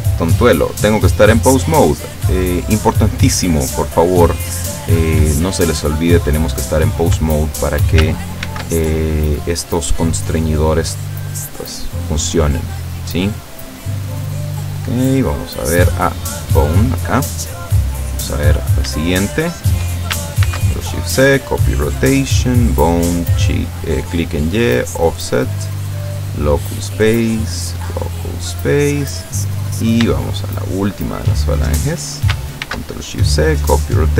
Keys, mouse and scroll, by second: 1.9 click, 2.8 click, 4.0 right click, 5.2 click, 5.9 click, 6.6 right click, 7.5 shift+right click, 8.5 ctrl+shift+c, 9.1 ctrl+shift+click, 10.7 click, 11.7 click, 12.2 click, 12.8 click, 13.4 click, 14.1 click, 16.3 click, 16.8 click, 17.2-19.6 middle drag, 17.7 right click, 18.4 right click, 19.4 shift+right click, 20.5 ctrl+shift+c, 21.2 click, 22.3 click, 22.7 click, 23.1 click, 24.7 click, 25.3-25.9 drag, 26.0 click, 26.9 click, 27.4 click, 28.5 click, 29.4 right click, 30.6 shift+right click, 32.7 ctrl+shift+c, 33.2 ctrl+shift+click.